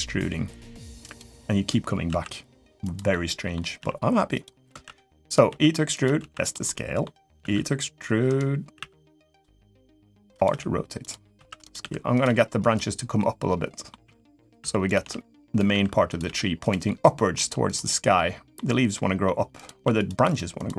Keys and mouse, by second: 0.8 click, 1.8 s, 2.9 middle click, 3.5 g, 4.5 s, 5.2 e, 6.0 s, 6.4 middle click, 7.2 r, 8.5 e, 9.6-12.0 typing, 12.9 middle click, 13.8-16.0 typing, 16.6 middle click, 17.3 g, 17.9-19.0 middle drag, 19.3 click, 20.3 shift+click, 20.6 middle click.